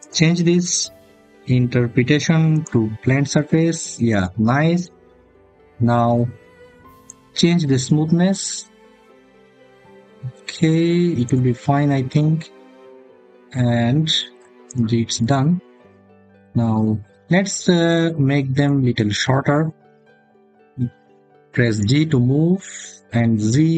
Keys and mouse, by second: 3.3 click, 6.8-11.1 drag, 21.6 g, 23.3 z.